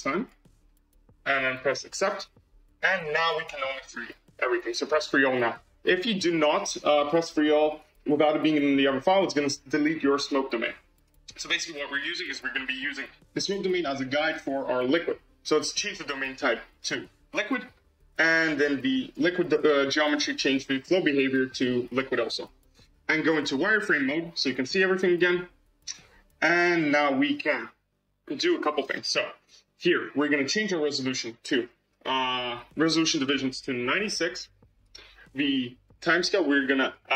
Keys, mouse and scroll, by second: 4.9-5.6 drag, 5.6-6.3 scroll up 5, 6.3-8.4 scroll down 3, 10.1 click, 10.9 click, 11.8 click, 13.6-16.0 scroll up 1, 16.6-19.0 drag, 20.6-22.8 drag, 23.4 z, 24.3 scroll up 2, 26.9-28.7 scroll down 18, 29.8-30.4 scroll up 14, 32.5-34.7 drag, 36.7-37.1 drag.